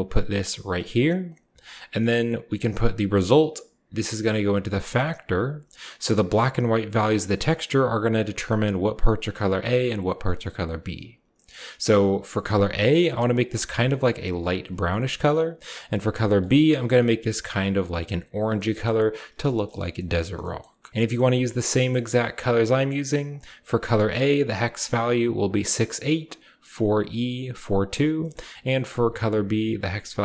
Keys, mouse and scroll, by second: 0.5 click, 1.0 click, 1.3-3.7 scroll up 1, 1.7 middle click, 1.8-3.7 drag, 4.7-5.9 drag, 5.3-7.4 scroll down 1, 6.0-10.2 drag, 6.0-7.4 middle drag, 8.1-10.2 scroll up 1, 10.8-11.9 scroll up 1, 11.2-12.2 middle drag, 11.9 scroll up 1, 12.2-15.6 drag, 13.8-15.5 scroll down 1, 15.6-16.1 scroll down 1, 16.2 click, 16.6-17.1 scroll down 1, 17.1 scroll up 1, 17.4 click, 18.4 scroll up 1, 18.5 middle click, 19.4 click, 19.4-20.4 scroll up 1, 20.9 ctrl+v, 23.1-25.1 drag, 27.9-28.8 middle drag, 28.6-30.2 drag.